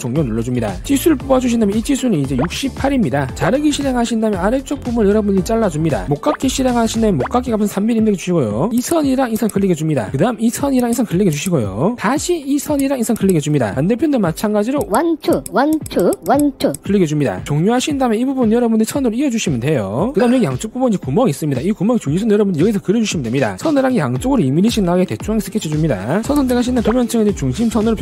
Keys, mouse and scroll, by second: 0.2 click, 0.7 click, 0.9 click, 1.7 click, 2.4 click, 4.1 click, 4.6 scroll down 1, 4.9-5.4 scroll up 1, 6.1 click, 6.3 right click, 7.0 click, 9.1 click, 9.9 click, 11.1 click, 11.8 click, 13.0 click, 13.7 click, 15.1 click, 15.5 click, 15.7 click, 16.2 click, 16.5 click, 16.9 click, 17.6 click, 18.6 click, 19.0 click, 19.8 click, 24.3 1, 25.0 click, 26.3 click, 27.0 click, 27.6 scroll down 2.